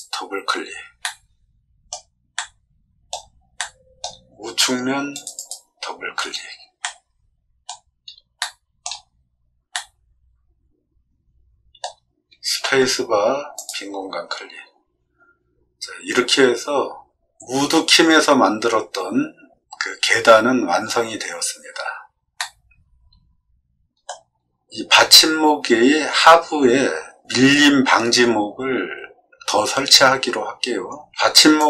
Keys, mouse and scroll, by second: 1.0 middle click, 2.3 middle click, 3.5 middle click, 5.1 click, 5.8-6.2 scroll up 2, 6.8 middle click, 7.7 scroll up 2, 7.8 scroll down 2, 8.3 shift+middle click, 9.0 middle click, 9.7-11.7 middle drag, 12.6 space, 13.5 click, 22.3-24.0 middle drag, 31.5 click.